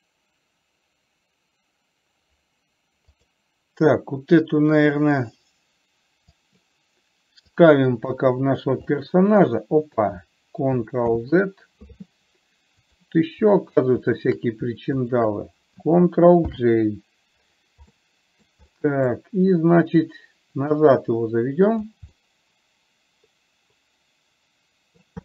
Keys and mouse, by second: 3.4 click, 6.7-7.9 drag, 8.4 KP_3, 9.4-10.4 middle drag, 11.5 ctrl+z, 13.1-13.5 drag, 14.4 shift+click, 15.5 shift+click, 16.9 ctrl+j, 18.4-18.7 middle drag, 19.1 middle click, 20.4-22.4 drag, 22.5-25.2 middle drag.